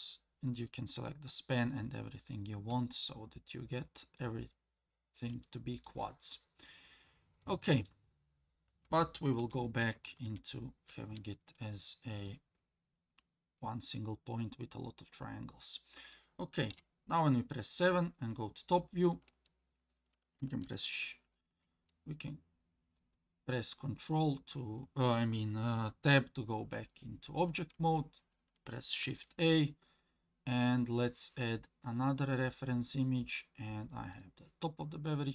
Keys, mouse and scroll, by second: 0.6 click, 2.9-4.2 middle drag, 4.5-4.9 scroll up 2, 4.9 scroll down 2, 5.4 shift+middle click, 7.4 middle click, 8.2 scroll down 1, 9.4 ctrl+z, 9.8 ctrl+z, 11.3-12.3 middle drag, 12.6-13.1 scroll up 2, 13.1-14.2 scroll down 3, 14.1 scroll up 2, 15.1 scroll down 1, 15.2 scroll down 1, 16.7 KP_7, 17.4-18.7 scroll down 5, 21.5 Tab, 23.0 click, 24.1 click, 26.9 click, 29.0 shift+a.